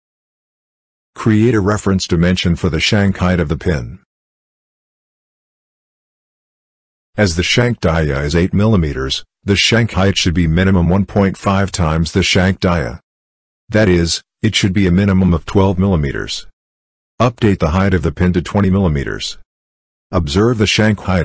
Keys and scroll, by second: 20.4-21.2 typing.